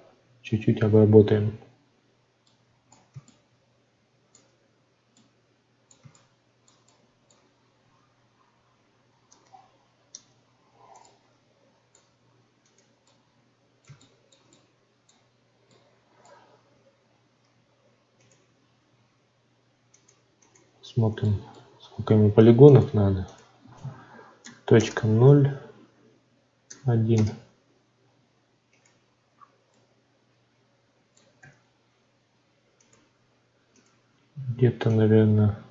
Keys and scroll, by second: 21.6 ctrl+z, 27.1 Return, 31.4 ctrl+z.